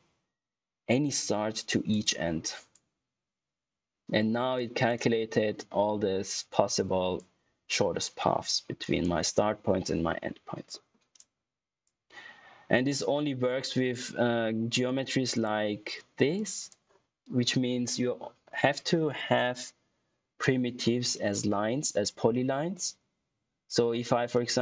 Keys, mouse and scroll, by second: 1.8 click, 10.6 middle click, 11.1 click, 14.8 click, 21.0-21.4 scroll up 1, 23.8 middle click.